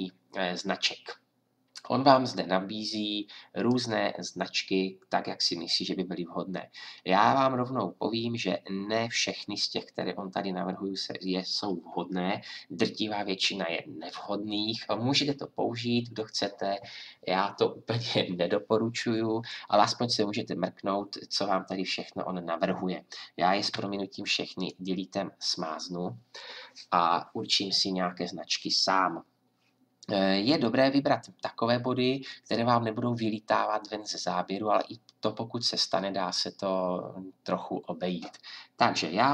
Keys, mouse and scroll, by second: 23.7 Delete.